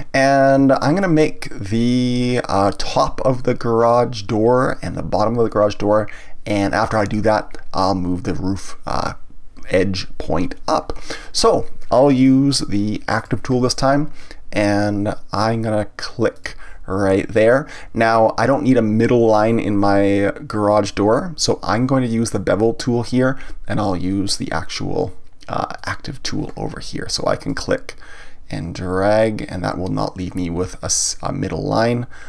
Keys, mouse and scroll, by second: 13.2 click, 16.3 click, 25.7 click, 27.5 click.